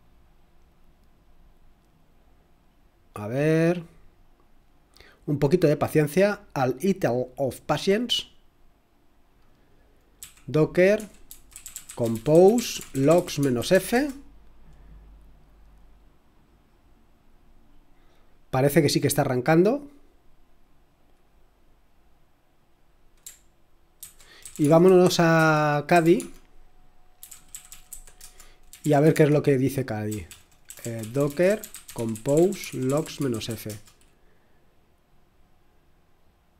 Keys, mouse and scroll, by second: 10.2-14.2 typing, 24.0 ctrl+c, 24.2-34.0 typing.